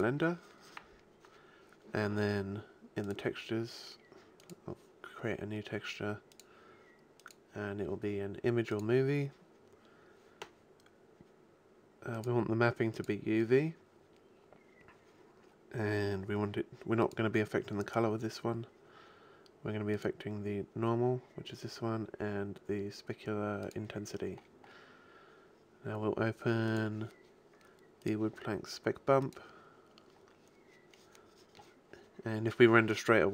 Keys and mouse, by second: 3.1-9.1 drag, 9.5-12.2 middle drag, 12.2-13.9 drag, 13.9-14.5 middle drag, 17.1-18.9 drag, 18.9-20.0 middle drag, 20.0-21.9 drag, 23.7-25.5 drag, 25.5-26.7 middle drag, 26.7 click, 29.5-30.9 drag.